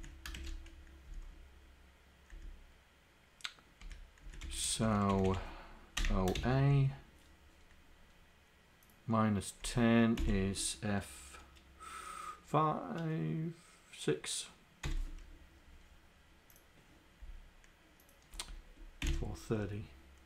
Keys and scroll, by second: 0.0 Down, 0.4 shift+Insert, 1.2 Down, 3.9 Up, 4.0 Down, 4.5 End, 4.8 Left, 5.2 Delete, 6.4 shift+a, 9.7 Left, 10.2 Delete, 14.9 6, 18.4 Left, 19.1 Delete, 19.2 3.